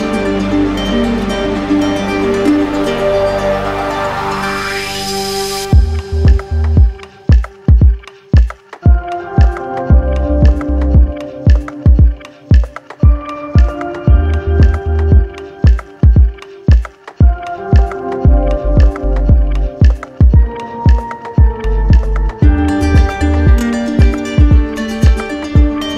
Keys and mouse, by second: 1.2 click, 1.8 click, 4.1 click, 5.2 click, 5.4 z, 6.1 click, 7.3 alt+click, 8.3 right click, 9.7 click, 11.2-12.3 drag, 12.5-13.6 drag, 14.6-15.7 drag, 16.2-17.3 drag, 18.4-19.4 drag, 23.2 click, 24.0 shift+click.